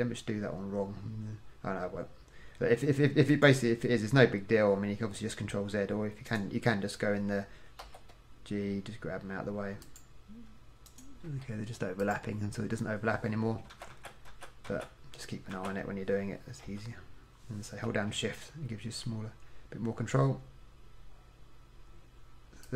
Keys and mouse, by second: 7.9 g, 11.0 click, 11.4 g, 13.8 ctrl+z, 14.1 ctrl+z, 14.4 ctrl+z, 14.8 ctrl+z, 15.7 ctrl+z, 16.8 i.